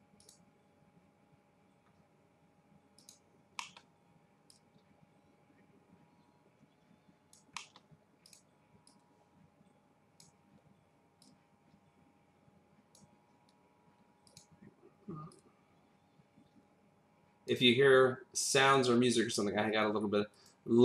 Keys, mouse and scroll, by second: 0.2 click, 1.8-3.0 scroll up 1, 3.0 click, 3.6 middle click, 8.2 click, 8.8 click, 10.4-11.1 scroll up 1, 11.2 click, 14.2 click, 15.3 click, 19.6 click.